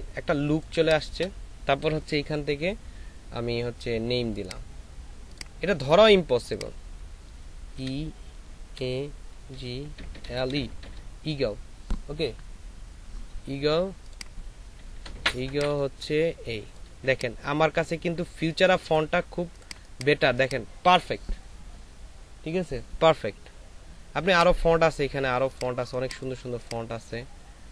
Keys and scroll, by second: 7.7 shift+e, 8.7 shift+a, 9.5 shift+g, 10.2 shift+l, 19.9 space, 25.9 space.